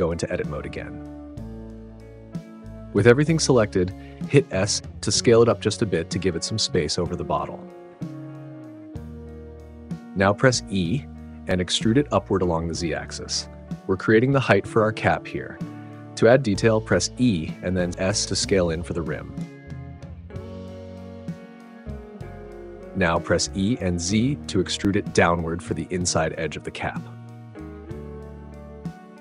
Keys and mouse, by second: 0.3 middle click, 1.9 Tab, 2.5 a, 5.9 s, 11.1 e, 12.8 z, 16.3-17.5 middle drag, 17.5 e, 17.9 s, 22.4 click, 22.6 KP_Decimal, 23.1 e, 23.6 z, 26.5 click, 26.7 middle click.